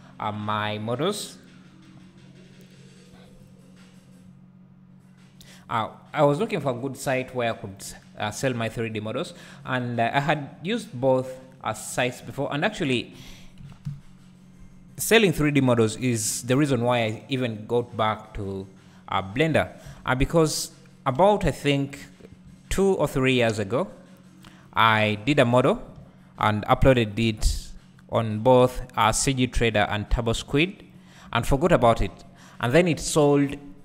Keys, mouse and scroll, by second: 7.7-13.6 drag, 13.6 KP_Decimal, 13.9 KP_1, 16.2-22.0 drag, 18.6-19.9 scroll down 2, 19.9 KP_7, 21.2 1, 22.9-33.8 shift+drag, 31.2 `, 32.4-33.8 scroll down 2.